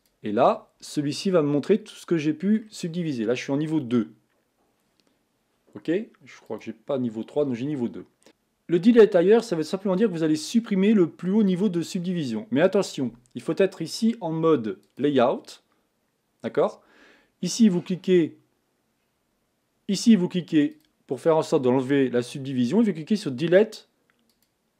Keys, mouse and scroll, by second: 0.9-16.1 middle drag, 16.1 click, 21.1-24.7 drag.